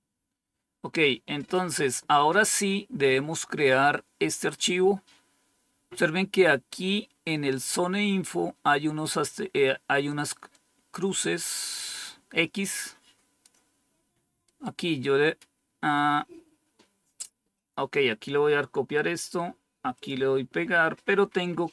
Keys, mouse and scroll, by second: 2.4 scroll down 1, 10.4-13.4 drag, 17.5 click, 19.9 click.